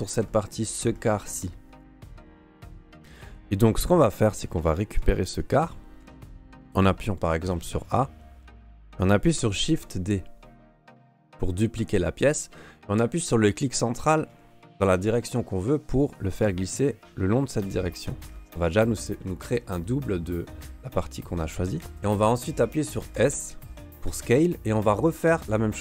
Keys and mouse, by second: 0.0 alt+middle click, 0.3 alt+middle click, 0.9 shift+middle click, 1.8 right click, 2.0 middle click, 3.9 alt+middle click, 4.4 alt+middle click, 4.9 shift+middle click, 5.1 middle click, 5.5 a, 6.0 a, 9.6 shift+d, 18.3 shift+middle click, 23.1 s.